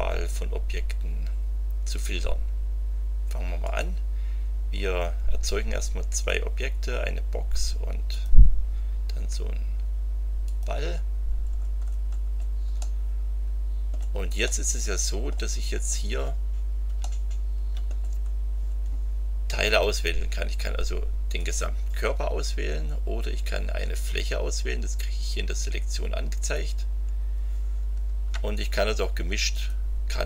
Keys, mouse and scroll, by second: 3.6 click, 6.1 click, 8.1 click, 10.4 click, 11.3-11.7 scroll down 1, 11.9 scroll down 1, 12.8-14.1 middle drag, 14.4-15.5 drag, 15.6-15.9 scroll up 2, 17.0-18.0 shift+middle drag, 18.3-18.8 shift+scroll up 5, 21.3 click, 26.4 click, 29.5 ctrl+click.